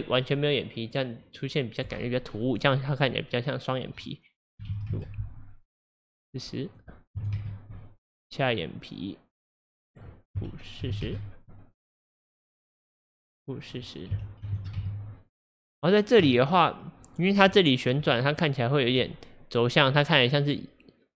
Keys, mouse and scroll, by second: 2.3-8.6 drag, 9.9-12.7 drag, 13.7-18.2 drag, 18.0 middle click, 18.2 scroll.